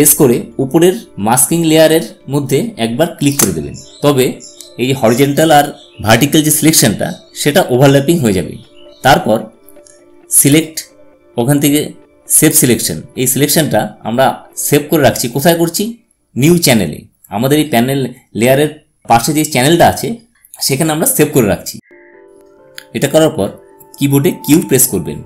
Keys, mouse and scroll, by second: 4.2 ctrl+alt+shift+click, 11.4 click, 24.2 q.